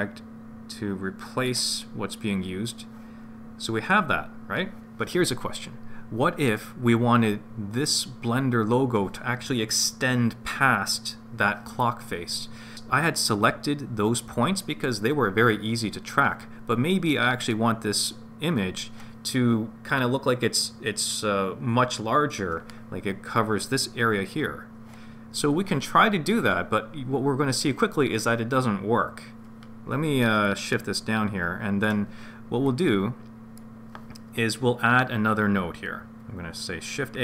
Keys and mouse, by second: 30.5-32.0 drag, 32.7 click, 32.8 click, 37.1 shift+a.